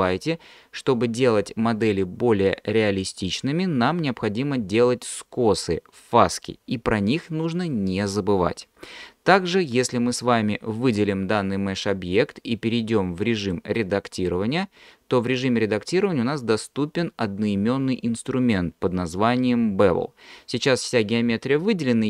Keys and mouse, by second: 13.4-14.4 drag.